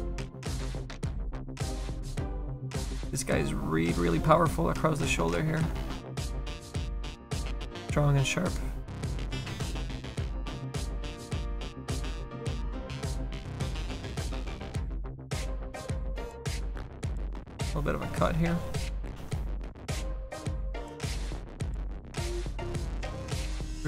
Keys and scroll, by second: 9.5 s, 19.2 s.